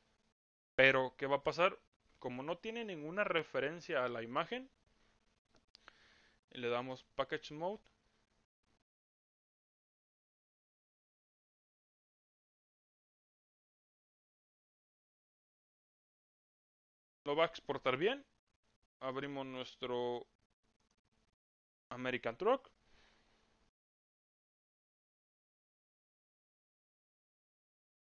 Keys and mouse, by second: 6.8-16.7 drag.